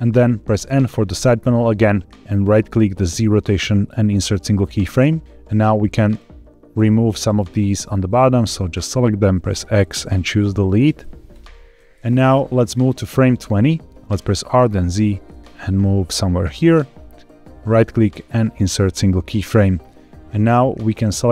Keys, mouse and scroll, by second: 0.5 n, 2.9-4.1 right drag, 5.6 click, 6.0 click, 6.7 x, 8.0 click, 8.2 click, 9.1 x, 10.2 click, 10.4 click, 10.9 x, 12.2-13.3 drag, 14.1 r, 14.3 z, 16.3 click, 17.6-19.0 right drag, 20.8 click.